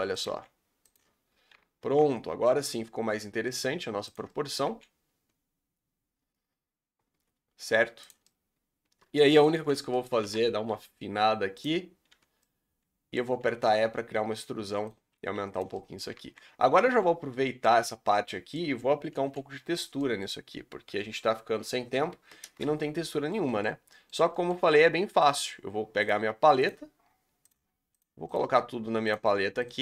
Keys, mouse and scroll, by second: 0.2 g, 2.0 z, 2.6-4.1 middle drag, 4.1 alt+click, 4.2 middle click, 4.6 g, 8.2-9.5 middle drag, 9.5 l, 9.9 middle click, 10.2 s, 12.1 o, 12.4 middle click, 13.3 e, 15.1 s, 15.7 middle click, 16.1 z, 16.6 scroll down 1, 16.8 z, 17.2 scroll down 1, 17.4 middle click, 17.7 z, 18.1 Tab, 18.2-19.2 middle drag, 19.2 KP_Divide, 19.9-20.3 middle drag, 20.3 scroll down 3, 20.8 KP_5, 21.4 KP_5, 22.5 ctrl+space, 23.1-23.6 middle drag, 23.6 scroll up 3, 23.9 middle click, 24.0 scroll down 1, 24.3-26.0 shift+middle drag, 26.0 click, 27.4 click, 29.6 click.